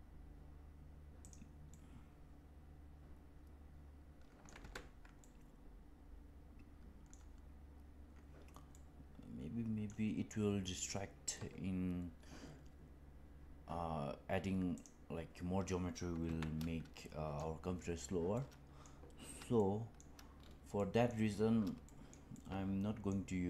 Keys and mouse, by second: 1.6-4.6 middle drag, 4.8 ctrl+z, 5.2-7.0 middle drag, 8.6-9.8 middle drag, 14.7 click, 16.2 Tab, 16.9 middle click, 18.3-18.8 middle drag, 19.7 shift+middle click, 20.7-21.0 middle drag, 21.8 shift+middle drag, 22.2-23.0 middle drag.